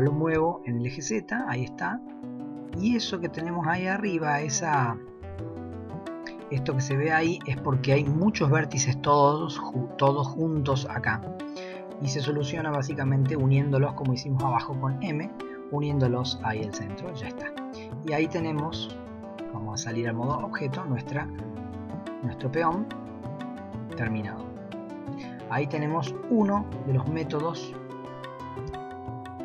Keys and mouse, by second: 4.5 middle click, 14.4 m, 16.8 middle click, 17.7 middle drag, 18.9 KP_1, 20.3 Tab, 21.5-21.8 shift+middle drag, 22.8 middle click, 23.1-25.1 middle drag, 25.7-26.0 middle drag, 26.4 g.